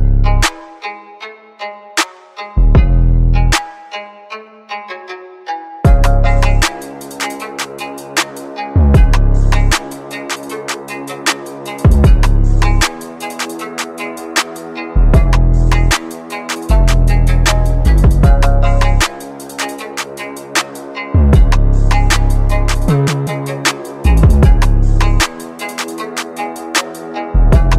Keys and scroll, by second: 1.1-3.9 typing, 5.9 space, 8.0 space, 11.6 space, 13.6 space, 15.6-18.1 typing, 17.9 Return, 19.8 space, 24.5 space, 25.0 shift+a, 26.4 ctrl+c, 26.6 ctrl+v.